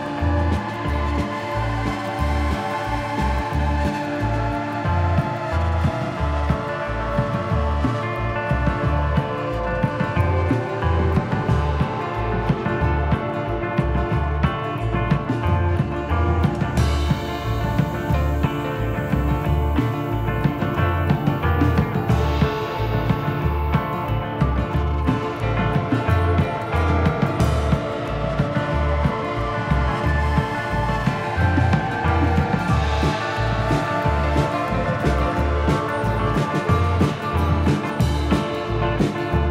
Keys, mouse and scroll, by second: 0.1 middle click, 0.1-0.5 scroll down 4, 1.1-1.4 scroll down 1, 1.5 shift+middle click, 2.0-2.5 scroll down 3, 2.2 shift+middle click, 3.3 shift+d, 5.5 shift+middle click, 5.9-6.3 scroll up 6, 6.7 g, 8.1-8.6 scroll down 7, 8.7 shift+middle click, 9.3 shift+d, 11.7 shift+middle click, 12.4 scroll up 2, 13.3 scroll up 1, 13.3 s, 14.4 g, 15.3 s, 16.6 scroll down 3, 16.8 middle click, 18.1 click, 20.6 z, 21.4 middle click, 22.5 click, 25.9 middle click, 26.9 middle click, 27.3 scroll down 3.